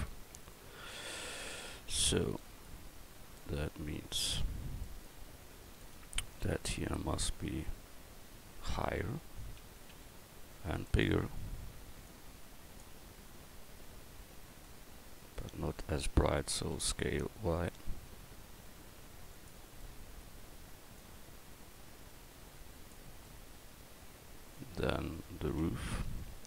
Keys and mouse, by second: 0.0 middle click, 0.5 middle click, 0.8 middle click, 1.0 middle click, 5.5 Tab, 9.9 s, 11.1 middle click, 12.1-13.1 drag, 15.1-16.8 middle drag, 16.8 s, 25.6 Tab.